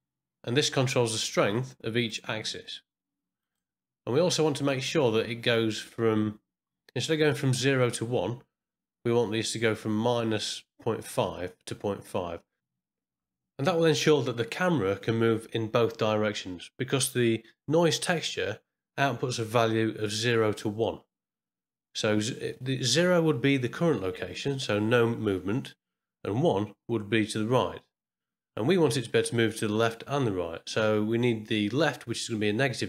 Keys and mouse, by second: 0.6-2.1 drag, 2.6 click, 4.2 middle click, 4.9 middle click, 5.4 click, 12.7 middle click, 24.5-25.8 drag, 27.0 click.